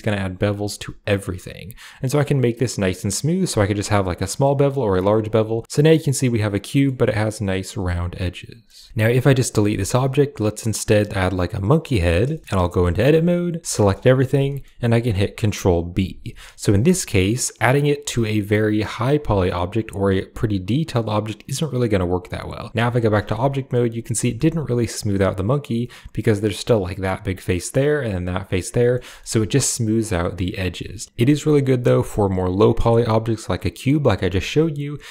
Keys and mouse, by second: 5.1 Tab, 5.5-6.7 middle drag, 7.5-8.5 middle drag, 8.7 shift+middle click, 8.9 x, 9.5 shift+a, 12.2 shift+middle drag, 12.5 Tab, 13.0 shift+middle click, 13.5 a, 13.6 a, 14.3 click, 15.9 ctrl+b, 22.7 Tab, 23.2-23.6 shift+middle drag, 24.1 shift+middle drag, 28.7 middle click, 28.9 middle click, 29.2 Tab, 30.9 Tab, 31.3 middle click, 34.1 x.